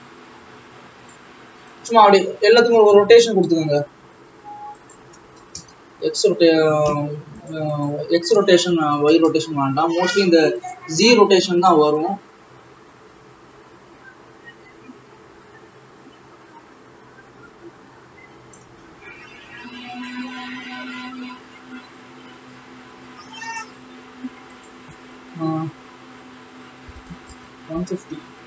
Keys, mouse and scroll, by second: 24.7-28.1 drag.